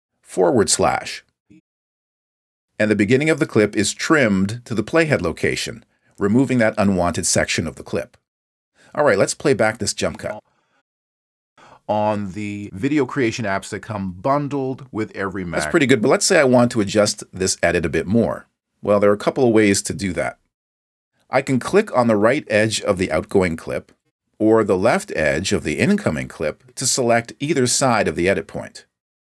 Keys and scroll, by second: 1.4 alt+/, 11.4 space, 15.8 space.